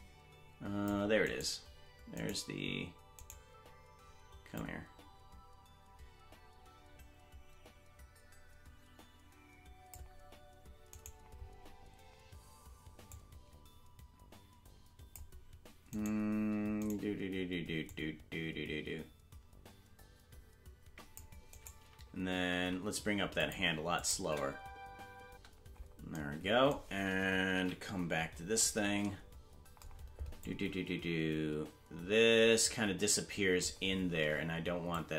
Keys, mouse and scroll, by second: 4.5 click, 4.5 right click, 13.1 click, 13.1 right click, 16.2 right click, 17.8 click, 17.8 right click, 21.5 right click, 22.5 g, 23.9 click, 24.2 space, 26.1 space, 27.5 KP_Decimal, 28.1 scroll down 5, 30.4 click, 34.9 shift+click.